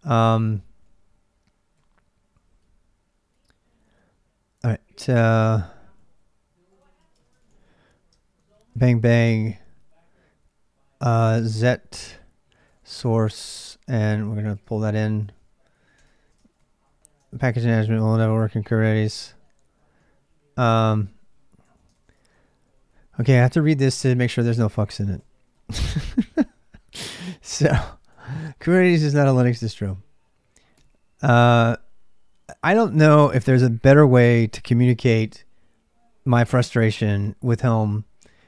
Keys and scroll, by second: 0.0-38.4 typing, 6.8 Return, 6.9 Return, 7.1 ctrl+[, 7.2 ctrl+j, 14.3 Return, 15.0 ctrl+[.